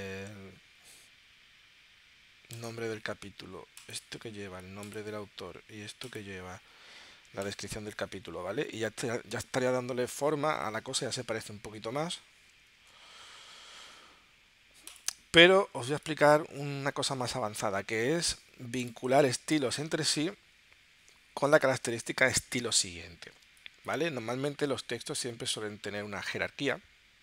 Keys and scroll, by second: 10.7 super+Tab, 17.7 space, 19.0 space, 21.8 space, 23.5 space.